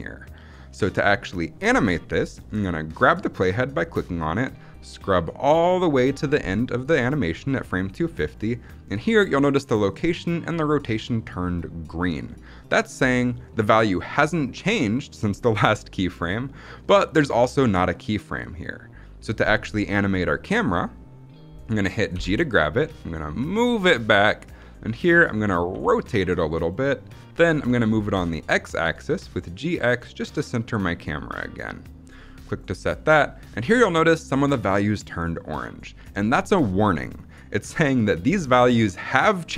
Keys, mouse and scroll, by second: 2.9-8.2 drag, 19.8 scroll down 1, 20.1-21.0 shift+middle drag, 22.0 g, 24.9 click, 25.6 r, 26.5 click, 27.8 g, 28.0 x, 32.3 click.